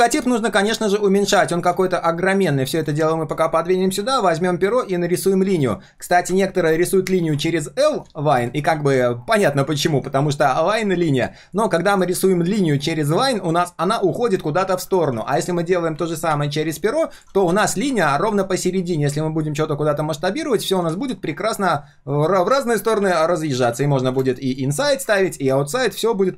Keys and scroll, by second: 0.1 ctrl+shift+3, 2.0 ctrl+shift+3, 15.1 ctrl+z, 20.9 ctrl+z.